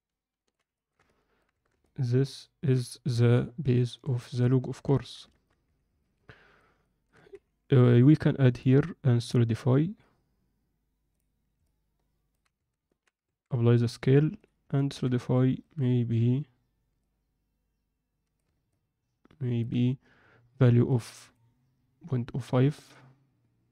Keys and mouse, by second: 0.7 ctrl+alt+middle click, 1.0 middle click, 1.5 Tab, 1.8-2.6 alt+middle drag, 3.1 KP_7, 4.0 Tab, 4.4 ctrl+middle click, 4.9 alt+shift+middle click, 5.2 ctrl+alt+middle click, 5.6 z, 6.0-6.6 ctrl+alt+middle drag, 6.8 ctrl+alt+middle click, 7.3 z, 8.0-11.2 drag, 11.6 alt+middle click, 12.5 Tab, 12.8 middle click, 13.4 ctrl+a, 14.7 ctrl+middle drag, 15.2-15.6 alt+middle drag, 17.0-18.4 drag, 18.6-19.6 middle drag, 22.8-23.7 middle drag.